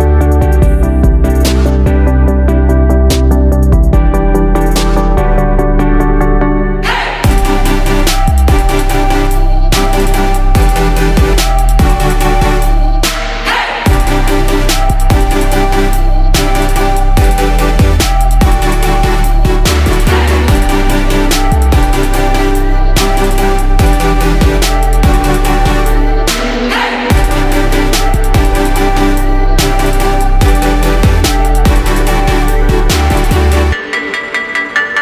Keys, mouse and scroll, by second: 3.2 F4, 4.4 click, 4.9 F4, 5.5 click, 12.0 F4, 12.8 click, 13.0 F4, 13.7 click, 17.8 F4, 18.6 click, 19.0 F4, 19.8 click, 23.8 F4, 24.5 click, 24.9 F4, 25.8-27.6 drag, 29.5 F4, 31.1 click, 31.5 F4, 32.1-35.0 drag.